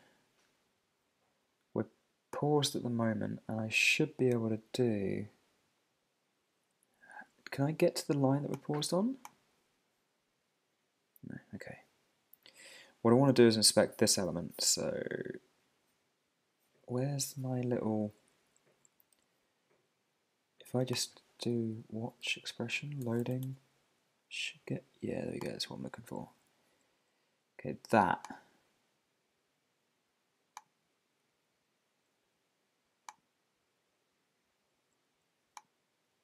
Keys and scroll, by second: 23.4 Return, 31.3 Down.